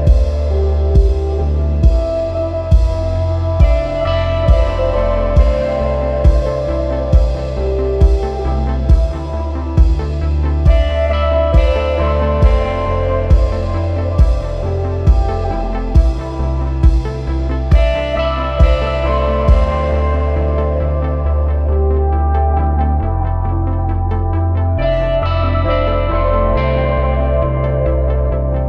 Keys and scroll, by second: 4.5 super+=, 5.0 super+=, 5.5 super+-, 21.4 super+-, 22.2 space, 22.7 space, 22.8 space.